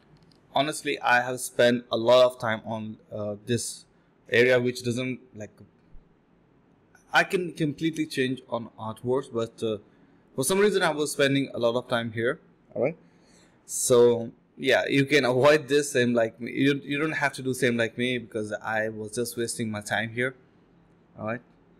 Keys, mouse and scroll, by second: 2.0 shift+f, 2.4 alt+click, 2.6 alt+click, 3.1 shift+click, 3.9 alt+click, 4.1 alt+click, 4.2 alt+click, 5.1 ctrl+b, 5.4 double click, 5.7 typing, 6.2 double click, 9.0 shift+click, 10.8 shift+click, 12.1 shift+click, 12.3 alt+click, 12.7 alt+click, 13.8-14.6 typing, 13.9 ctrl+b, 14.2 double click, 16.5 typing, 18.3 typing, 21.1 typing.